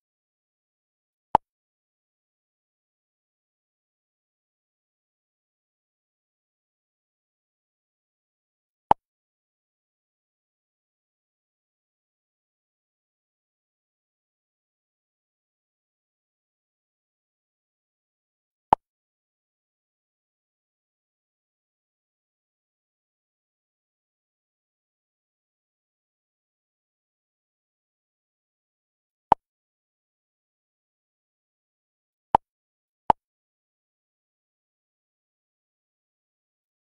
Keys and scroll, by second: 23.8 ctrl+-.